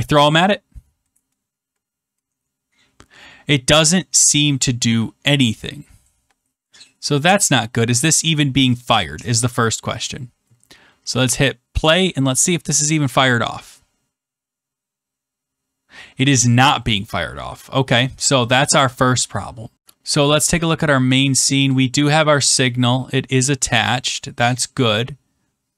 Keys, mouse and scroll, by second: 0.3 click, 7.2 click, 8.7 click, 9.3 click, 11.2 click, 13.6 click, 18.4 click, 20.3 click, 21.3 click.